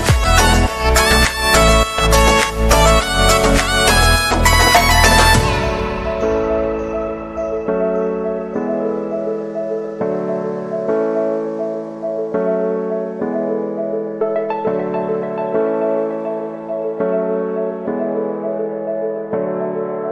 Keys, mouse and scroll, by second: 0.6 right click, 3.0 right click, 7.2 right click, 11.1 right click, 11.3 right click, 12.0 right click, 12.1 middle click, 12.3 right click, 15.3 right click, 16.6 right click, 18.1 right click, 19.3 right click.